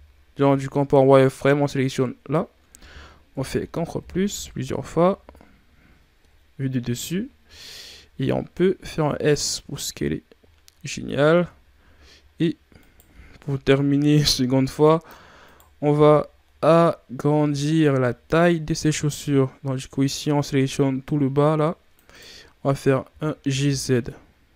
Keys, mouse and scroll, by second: 2.1 z, 3.3 ctrl+KP_Add, 3.4 ctrl+KP_Add, 3.7 ctrl+KP_Add, 3.8 ctrl+KP_Add, 4.1 ctrl+KP_Add, 4.3 ctrl+KP_Add, 4.5 ctrl+KP_Add, 4.7 ctrl+KP_Add, 5.1 ctrl+KP_Add, 6.1 KP_7, 7.1 scroll down 5, 8.9 s, 10.9 ctrl+scroll down 2, 11.2 Tab, 11.7 z, 12.1-12.6 scroll up 1, 12.6 right click, 13.0 b, 15.3 right click, 15.8 c, 22.9 g.